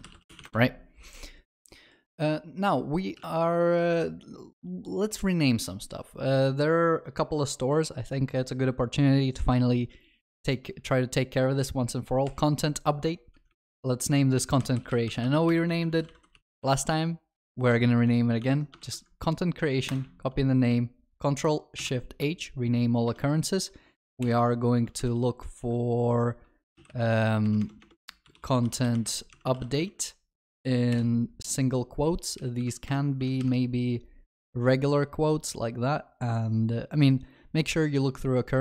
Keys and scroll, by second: 12.3 shift+F6, 18.9 ctrl+c, 21.9 ctrl+shift+r.